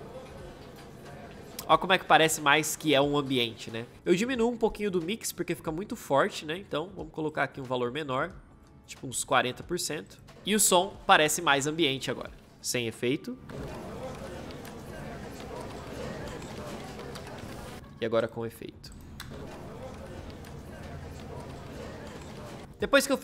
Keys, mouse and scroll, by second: 3.9 space, 10.3 space, 13.3 space, 17.7 space, 22.6 space.